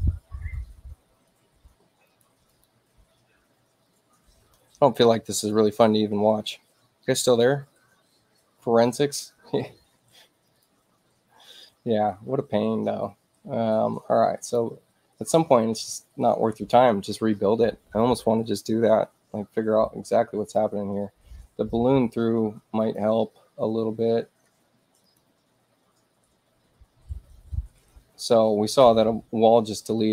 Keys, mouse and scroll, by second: 2.0 click, 2.4 click, 10.4 click, 14.4 click, 15.5 click, 22.7 click, 24.9 click.